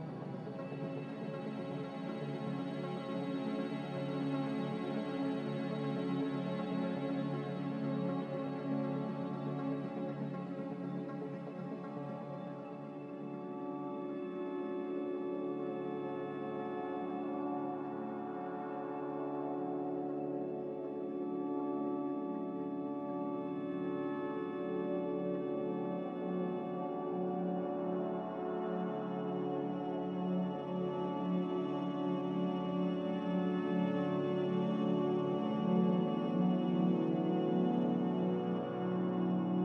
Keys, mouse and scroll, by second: 20.5 ctrl+z.